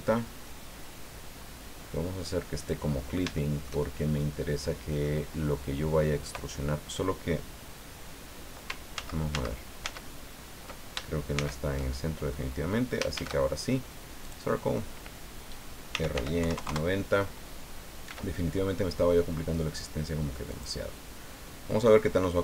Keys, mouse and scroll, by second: 1.4 scroll up 2, 2.6 click, 3.3-5.2 shift+middle drag, 5.3 scroll up 2, 9.0 ctrl+z, 11.3 shift+c, 13.1 shift+a, 14.2 click, 15.7-16.7 typing, 16.7 KP_Enter, 18.1 s, 20.5 click, 21.8-22.4 drag.